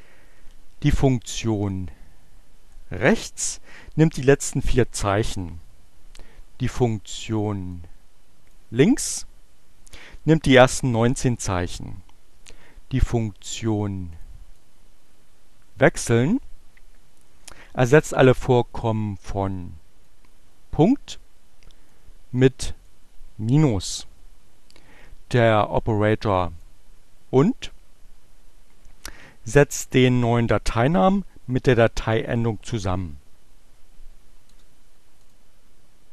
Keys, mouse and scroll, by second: 1.6-2.9 drag, 7.0 click, 13.9 click, 14.6-16.4 drag, 19.7-21.1 drag, 21.5-23.2 drag, 26.7-28.1 drag, 34.0 Return, 35.3 click.